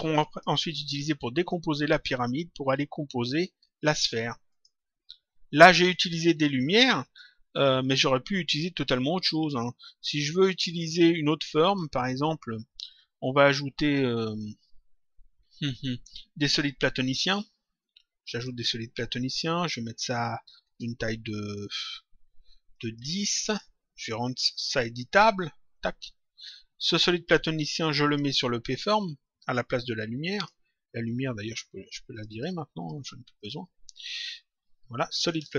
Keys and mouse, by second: 0.1 click, 1.3 click, 4.4 click, 5.9 click, 9.3 click, 10.7 click, 12.6 click, 17.8 click, 19.6 click, 21.0 Return, 22.6 click, 25.7 click, 27.7 click, 29.2 click, 32.0 click, 35.4 click.